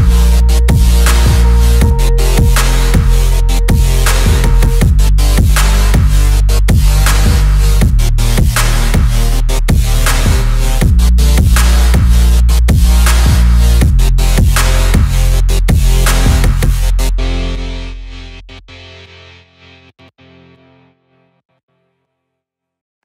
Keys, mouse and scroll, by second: 0.5 middle click, 1.2 shift+a, 4.0 s, 6.7 click, 7.2 g, 7.4 x, 9.0 click, 10.4-10.7 shift+middle drag, 11.6 s, 12.2 z, 13.6 click, 14.0-14.4 middle drag, 14.7-15.5 middle drag, 16.1 s, 16.6 x, 19.2 click, 19.6-20.4 middle drag, 20.6 middle click, 22.2 click.